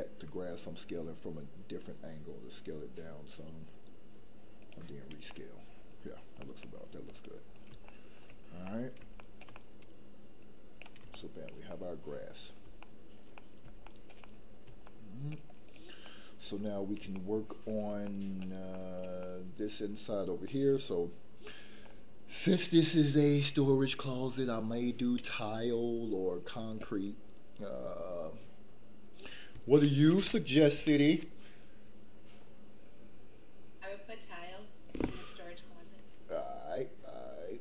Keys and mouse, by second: 5.3 middle click, 6.4 middle click, 7.9 shift+middle click, 8.6 middle click, 9.1 shift+middle click, 9.5-10.8 middle drag, 11.1 shift+middle click, 11.7 middle click, 12.8 shift+middle click, 13.3 middle click, 13.8 shift+middle click, 14.2 middle click, 14.9 shift+middle click, 15.6 click, 16.0 middle click, 17.1 shift+middle click, 18.0 shift+middle click, 18.7 shift+middle click, 19.2 middle click, 20.4-21.7 middle drag, 21.7 middle click.